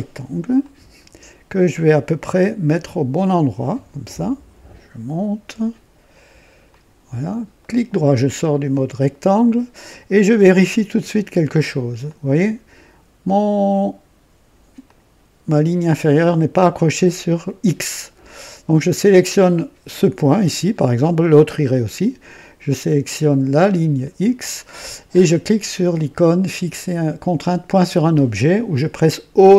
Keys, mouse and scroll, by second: 0.5 click, 3.6 click, 6.6 click, 7.5 right click, 12.0-14.6 drag, 14.8 click, 22.6 click, 29.3 o.